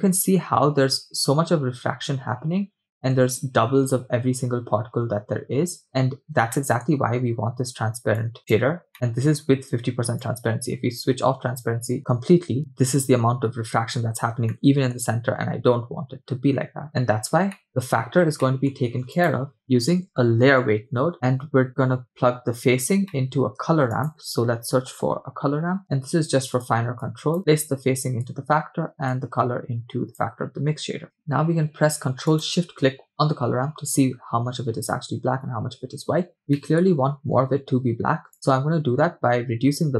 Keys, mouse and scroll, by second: 0.1-0.4 scroll up 2, 5.8 scroll down 3, 6.5-6.9 shift+middle drag, 8.2 click, 8.9 middle click, 10.2-11.7 drag, 13.4 scroll up 2, 14.5-15.0 shift+middle drag, 15.6 scroll down 2, 17.5 middle click, 18.5 middle click, 18.9 shift+a, 23.1 middle click, 23.7 shift+a, 27.0-28.4 drag, 29.2-30.7 drag, 32.8 ctrl+shift+click, 36.6 middle click, 38.3-39.9 shift+drag.